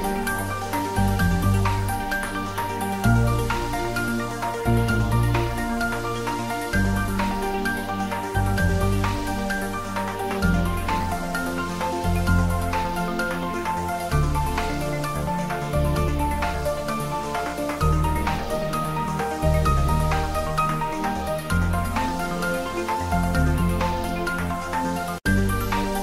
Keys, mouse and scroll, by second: 6.4 shift+z, 7.8 i, 10.3 click, 10.5 middle click, 11.1 e, 11.9 click, 12.0 Tab, 12.7 middle click, 13.1 Tab, 13.6 middle click, 15.5 click, 15.9 e, 18.1 click, 18.4-20.5 middle drag, 20.5 Tab, 21.0 g, 21.8 click, 22.0 Tab, 22.2-25.0 middle drag, 25.0 right click, 25.2 click, 25.6 ctrl+middle click.